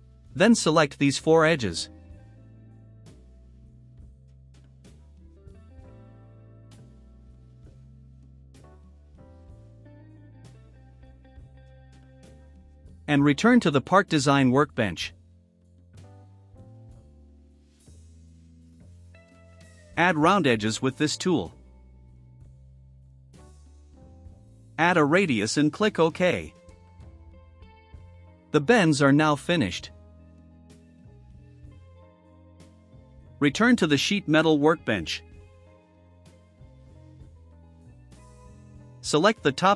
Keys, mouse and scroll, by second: 1.2 click, 2.7 click, 3.1 ctrl+middle click, 3.4 ctrl+scroll, 4.0 right click, 4.6 scroll, 4.7 ctrl+scroll, 5.7 ctrl+click, 6.2 right click, 6.5 middle click, 6.5 scroll down 1, 6.9 click, 8.3 ctrl+middle click, 8.3-8.7 ctrl+scroll up 2, 8.5 ctrl+middle click, 9.5 ctrl+click, 9.7 ctrl+scroll down 1, 10.3 ctrl+scroll up 1, 11.3 ctrl+click, 13.3 click, 17.0 click, 22.3 click, 24.7 5, 25.9 click, 27.1 middle click, 27.1 scroll down 2, 27.7 click, 28.8 scroll down 1, 29.2 click, 29.9 click, 30.6 right click, 31.9 click, 33.7 click, 37.4 click, 39.4 click.